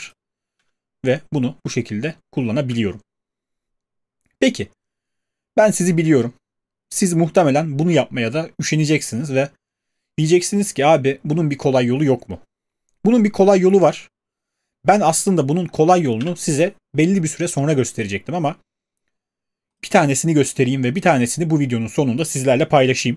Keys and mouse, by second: 0.6 space, 2.6 space, 16.2 q, 21.2 typing.